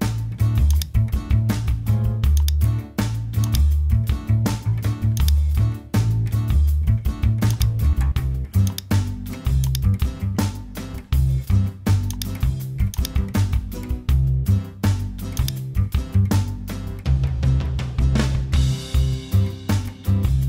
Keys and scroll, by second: 17.2-18.9 typing, 19.3 super+a.